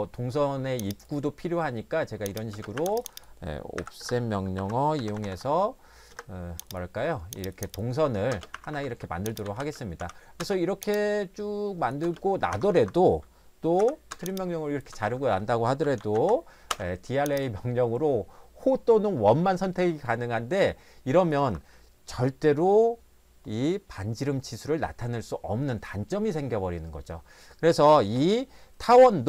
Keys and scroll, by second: 2.5 space, 2.8 Escape, 3.8-5.8 typing, 4.0 Return, 6.1 Return, 8.3 space, 8.5 Escape, 8.7 Escape, 9.4 e, 9.6 space, 10.0 t, 10.4 space, 12.0 space, 12.5 Escape, 12.8 Escape, 13.8-16.7 typing, 21.4 Escape.